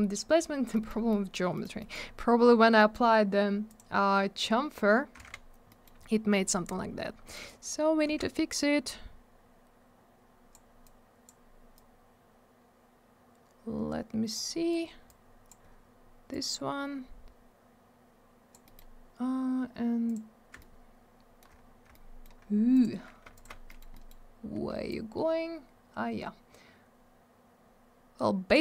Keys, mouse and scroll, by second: 0.4 scroll down 1, 0.8 alt+middle click, 1.1 middle click, 1.5 middle click, 1.6 middle click, 1.7 middle click, 1.9 double middle click, 2.0 scroll up 1, 2.7 middle click, 2.9 middle click, 3.6 click, 3.7 click, 5.2 alt+w, 5.7 middle click, 5.8 middle click, 6.2 scroll up 1, 7.3 click, 8.0 w, 8.5 click, 10.8 click, 11.7 click, 14.4 scroll up 1, 15.0 click, 15.6-16.3 scroll down 1, 16.3 click, 18.6 middle click, 18.7 middle click, 20.0 click, 20.1 click, 21.9 alt+middle click, 22.7 click, 22.8 click, 23.3 ctrl+click, 23.4 ctrl+click, 23.6 middle click, 23.8 middle click, 23.9 middle click, 24.0 double middle click, 24.9 click.